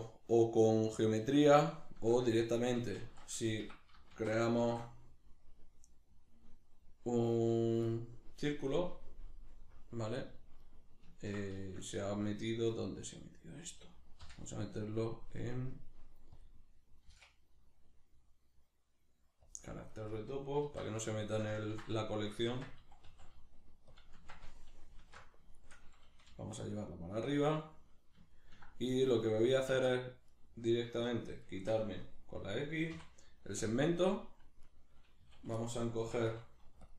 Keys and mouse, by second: 1.7-24.0 shift+middle drag, 3.0 shift+a, 3.7 Escape, 4.1 shift+c, 4.6 shift+a, 9.5 KP_Decimal, 14.2 m, 20.7 alt+q, 22.5 Tab, 24.0 click, 24.2 Tab, 25.0 alt+q, 25.5-27.4 shift+middle drag, 26.3 g, 27.4 click, 27.6-30.3 middle drag, 29.7 Tab, 30.3 right click, 31.1 shift+right click, 31.5 shift+right click, 32.9 x, 34.1 middle click, 34.7 right click, 35.2 a, 35.7-36.9 middle drag, 36.0 s, 36.9 click.